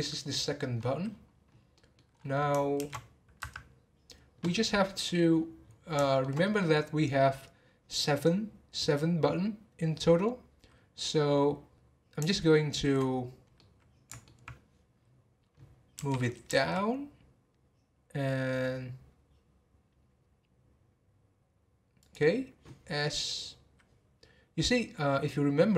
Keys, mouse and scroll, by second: 0.8-1.1 scroll down 10, 1.7 middle click, 2.1 scroll up 1, 5.3-6.1 scroll down 7, 6.1-6.7 shift+middle drag, 6.7 scroll up 1, 13.4 scroll up 1, 13.6-15.9 middle drag, 15.9 g.